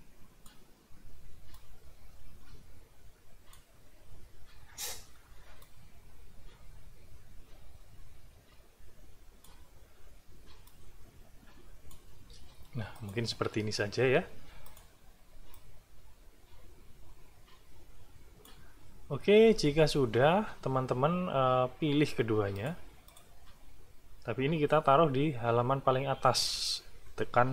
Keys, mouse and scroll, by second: 1.5-3.7 drag, 5.6-9.6 drag, 10.6-12.1 drag, 12.2 space, 12.9 click, 14.6 click, 15.5-18.6 drag, 22.5 click, 23.1 click.